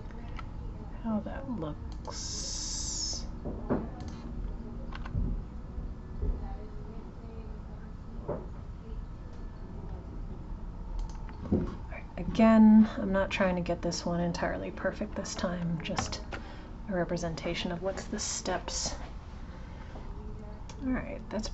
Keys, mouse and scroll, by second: 4.0 click, 15.9 alt+h.